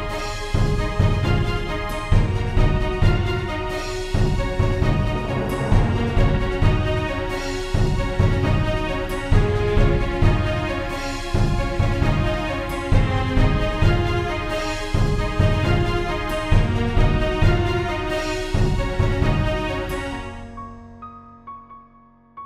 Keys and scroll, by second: 0.5 g, 2.3 g, 3.0 e, 4.2-6.9 typing, 12.2 e, 13.6 e, 15.4 shift+f, 15.6 a, 17.1 shift+f, 21.8 a, 22.1 z.